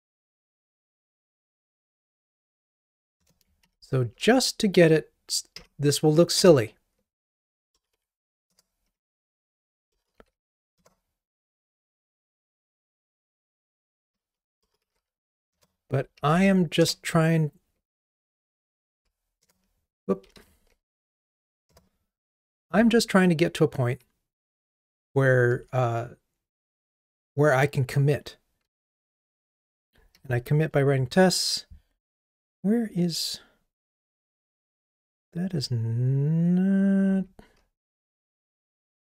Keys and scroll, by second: 3.3 Return, 15.7 Return, 20.4 super+z, 21.8 Return, 22.7 ctrl+r, 30.2 super+9.